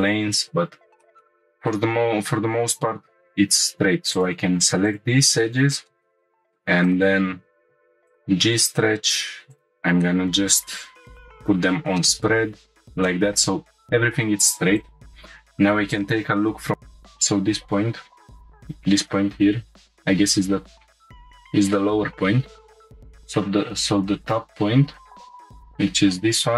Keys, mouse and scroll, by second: 0.6-1.0 scroll down 1, 1.0 middle click, 1.1 scroll up 2, 1.2 middle click, 3.5 2, 4.1 click, 4.8 ctrl+click, 5.4 middle click, 5.9 shift+middle click, 6.2-6.5 shift+middle drag, 6.2 scroll down 1, 6.8 right click, 9.5-11.4 drag, 12.0 middle click, 12.6 shift+middle click, 13.0 middle click, 14.7-16.1 drag, 16.7 click, 16.7 scroll up 3, 18.3 1, 18.6-19.9 drag, 20.5-21.1 scroll down 5, 21.1 scroll up 2, 22.9 click, 24.2 click, 25.0-26.1 scroll up 6, 26.1 g.